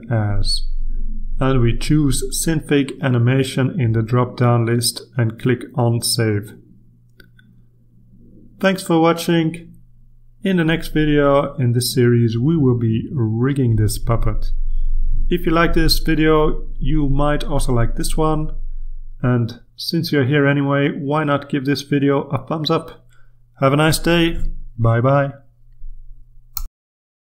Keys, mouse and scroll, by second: 0.0 click, 0.8 middle click, 1.6-2.6 scroll down 2, 2.6-3.5 scroll down 1, 3.5 middle click, 4.5 click, 6.2 click.